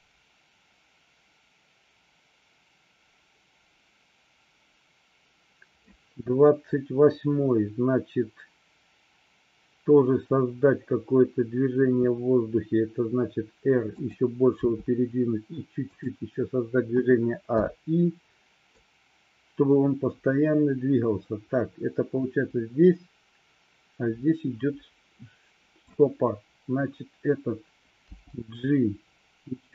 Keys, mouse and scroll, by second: 12.0 r, 14.0 click, 14.7 g, 16.0 click, 17.0 a, 17.7 i, 18.9-26.0 drag, 28.1 g.